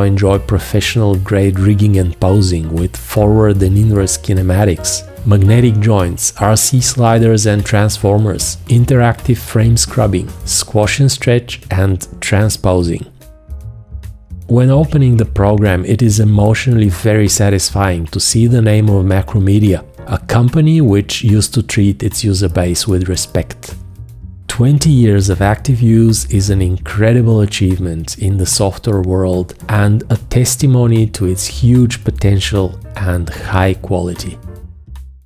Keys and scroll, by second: 17.4 F2.